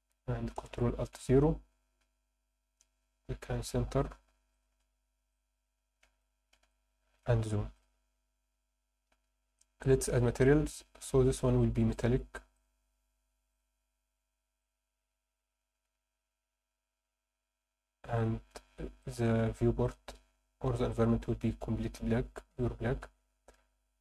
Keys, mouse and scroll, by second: 0.6 ctrl+alt+KP_0, 2.0 n, 3.9 click, 4.5 click, 4.7 n, 5.3 shift+middle click, 6.2 ctrl+middle click, 6.7 shift+middle click, 7.7 click, 11.9 click, 12.5 click, 13.5-16.6 drag, 16.8-18.0 scroll down 3, 18.2 click, 19.0 click, 19.8 click.